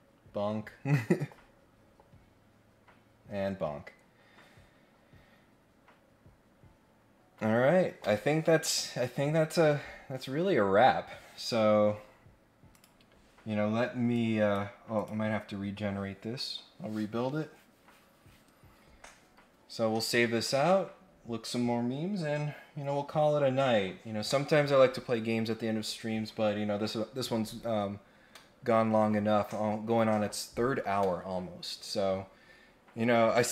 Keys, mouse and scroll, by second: 12.7 click, 14.1 click, 14.9 click.